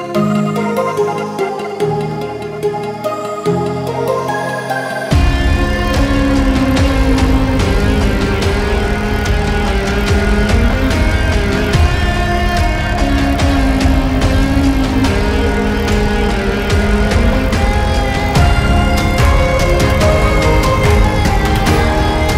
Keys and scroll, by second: 5.2 Delete.